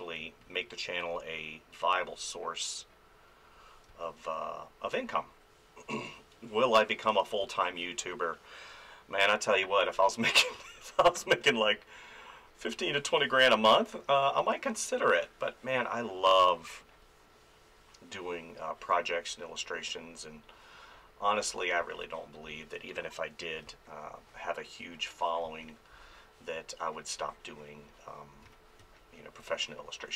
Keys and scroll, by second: 0.2 space, 3.9 ctrl+z, 7.4 space, 9.8 ctrl+z, 13.0 ctrl+z, 16.3 space, 21.8 space, 23.6 space, 25.4 space, 28.4 f, 28.8 space.